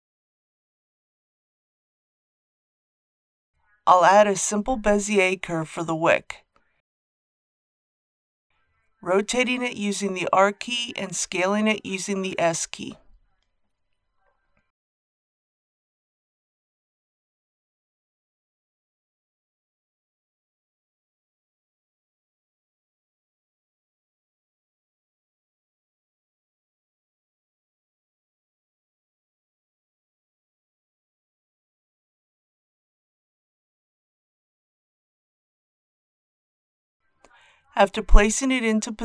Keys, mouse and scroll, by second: 0.1 shift+middle click, 4.0 shift+a, 8.0 click, 10.4 g, 11.0 z, 13.1 click, 20.6 r, 21.8 y, 22.2 KP_9, 22.4 KP_0, 24.8-26.9 middle drag, 26.9-27.8 typing, 30.2 s, 33.0 click, 33.5 g, 33.8 z, 36.6 click.